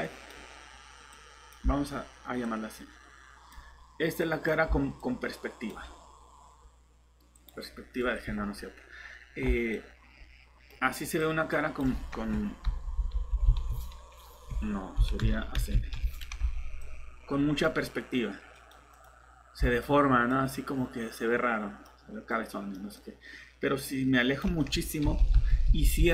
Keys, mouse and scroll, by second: 4.4-5.7 typing, 7.0-7.8 typing, 8.0 scroll down 1, 8.2 Escape, 9.8 click, 12.7 ctrl+9, 12.9 0, 16.6-17.6 typing, 19.3-20.3 typing, 23.9-24.6 typing, 25.0 ctrl+0.